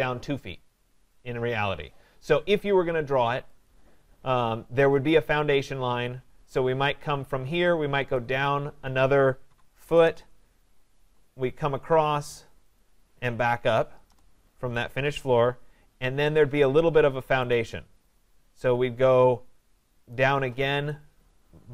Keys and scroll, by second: 10.0 Return.